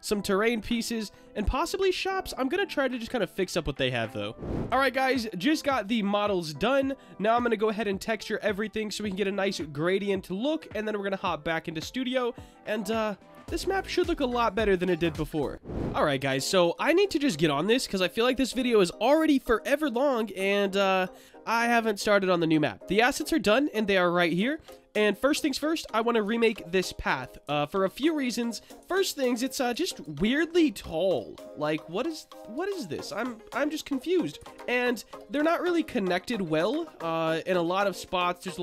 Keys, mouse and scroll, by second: 4.8-6.9 middle drag, 7.6-8.6 shift+middle drag, 9.4-10.0 shift+middle drag, 11.2-13.7 middle drag.